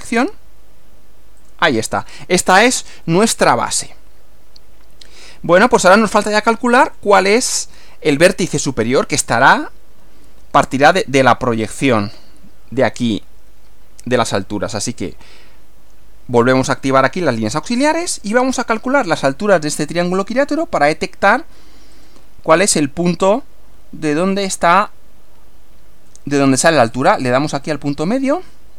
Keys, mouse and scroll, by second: 0.1 click, 1.4 click, 3.1-5.4 middle drag, 6.1 scroll up 1, 6.9 click, 16.9 click, 18.3 click, 21.9 click, 27.7 click.